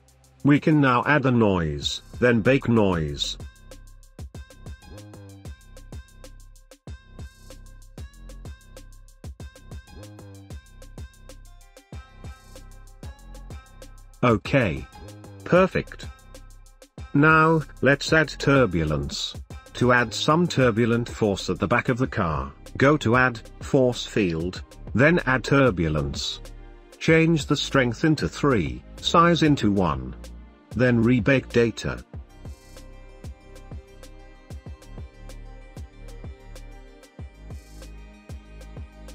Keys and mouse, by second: 0.9-7.7 drag, 8.4 click, 8.8 space, 27.8 middle click, 28.9 click, 30.2 click, 32.6-37.0 drag, 37.1 space.